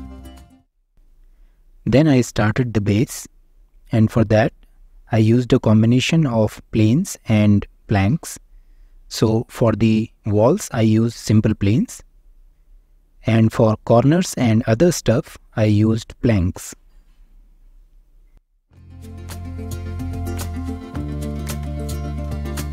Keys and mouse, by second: 1.4 ctrl+., 1.6 g, 2.2 ctrl+g, 3.2-13.0 typing, 3.9 click, 4.1 Tab, 6.4 click, 7.2 click, 7.5 click, 8.3 click, 8.4 click, 8.9 Escape, 9.3 click, 10.4 click, 11.2 click, 11.9 click, 14.5 click, 14.9-19.2 typing, 14.9 click, 16.5 middle click, 17.5 click, 18.7 alt+z, 19.0 click, 20.0 Tab, 20.0 drag, 20.1 middle click, 20.6 g, 20.9 click, 21.1 Tab, 21.2 click, 21.4 3, 21.6 click, 22.3 u.